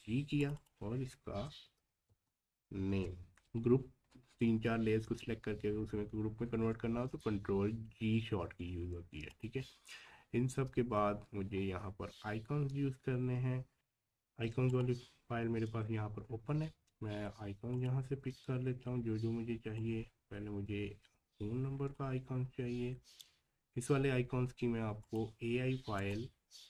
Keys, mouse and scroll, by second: 0.4 click, 1.4-2.6 typing, 2.9 Return, 4.0 scroll down 1, 9.3 click, 10.4-11.1 scroll down 1, 13.7 click, 14.7 click, 16.3 alt+scroll up 1, 17.7-26.6 drag.